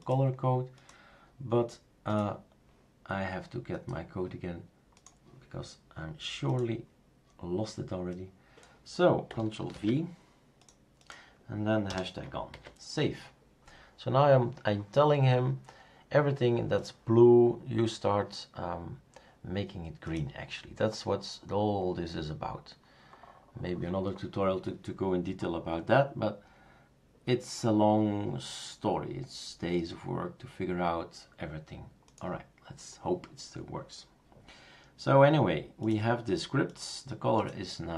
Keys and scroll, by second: 9.7 ctrl+v, 11.9 BackSpace, 12.5 ctrl+s.